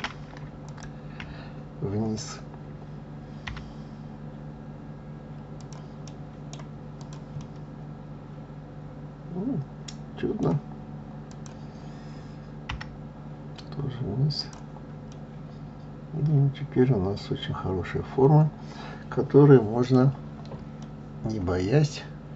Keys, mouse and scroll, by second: 0.6 shift+click, 3.5 g, 6.0 right click, 7.0 click, 7.4-10.4 middle drag, 11.3 click, 12.7 g, 15.1-18.2 middle drag, 20.8-22.3 middle drag.